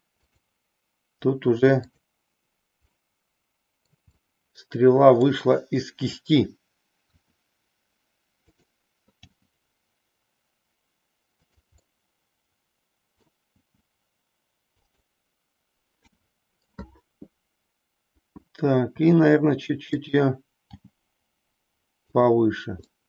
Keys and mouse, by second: 0.1 click, 1.9 click, 3.0-4.0 middle drag, 4.3-5.4 middle drag, 7.0 r, 8.5 click, 9.3 g, 11.5 click, 12.0-13.4 middle drag, 13.7 g, 14.9 click, 16.0 KP_3, 19.0 r, 20.0 click, 20.7 g, 22.1 click, 22.8-23.0 middle drag.